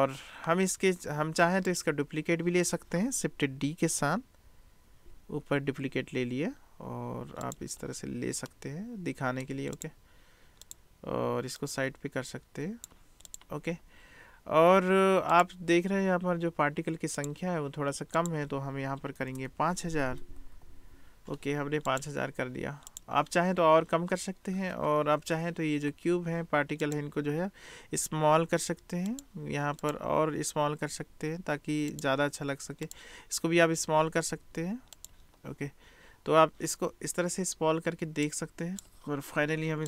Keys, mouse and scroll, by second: 1.8-2.4 drag, 5.0 shift+d, 8.6 click, 10.6 click, 11.7-13.0 drag, 13.3 click, 17.3 drag, 18.2-22.1 drag, 19.4 BackSpace, 20.4 0, 20.6 0, 26.8 click, 28.3 s, 29.8 click, 30.9 s, 32.9 click, 34.0 s, 38.3 click.